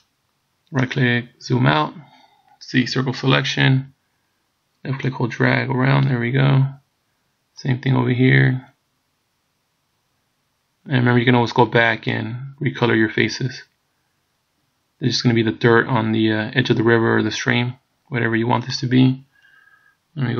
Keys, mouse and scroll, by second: 1.4-2.8 scroll down 1, 2.8 c.